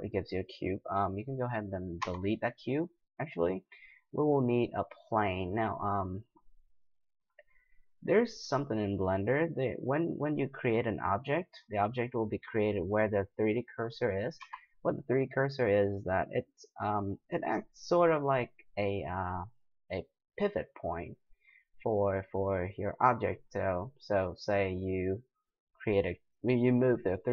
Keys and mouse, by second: 2.0 x, 7.7-11.7 middle drag, 11.7-13.7 drag, 13.7-17.3 middle drag, 14.4 x, 18.7-27.3 drag.